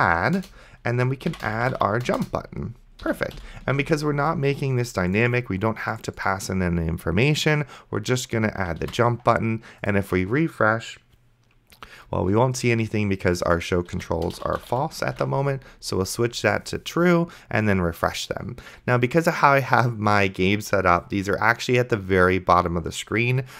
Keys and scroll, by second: 0.0-0.2 typing, 0.4 Return, 1.3-2.2 typing, 2.2 Return, 3.0 End, 3.4 ;, 4.0 ctrl+s, 9.1 ctrl+s, 14.0-15.1 typing, 15.4 ctrl+s.